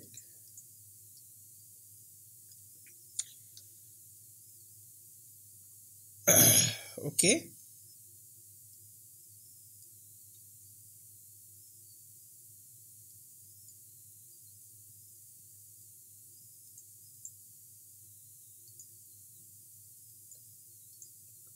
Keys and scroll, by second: 3.2 p.